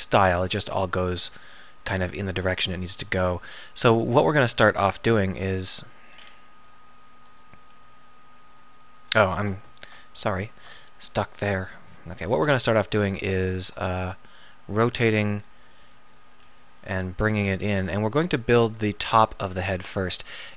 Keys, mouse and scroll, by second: 3.4 r, 4.9 r, 6.2-9.9 drag, 6.7 r, 10.2 alt+., 13.6 r, 17.1 g.